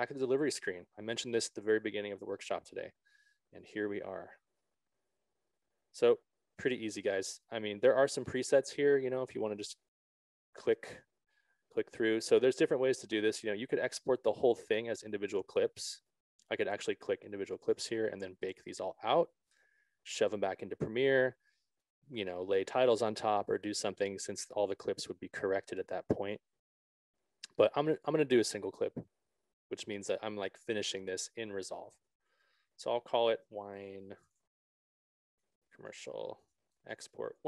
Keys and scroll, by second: 33.7-37.4 typing.